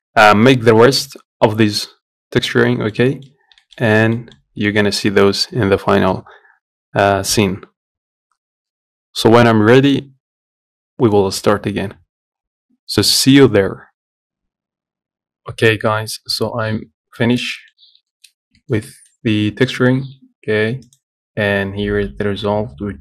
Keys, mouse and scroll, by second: 1.6-3.1 middle drag, 3.1 scroll up 1, 3.3 shift+middle click, 3.5-3.9 scroll down 2, 3.9 middle click, 4.1 scroll up 1, 4.4-14.3 shift+middle drag, 14.3-15.6 scroll up 3, 15.6-16.7 scroll up 1, 16.7-17.4 scroll down 3, 17.4 middle click, 18.1 scroll down 2, 18.3 shift+middle click, 18.6 scroll up 1, 18.8 shift+middle click, 19.6-20.2 scroll down 2, 20.2 Tab, 22.1 Tab.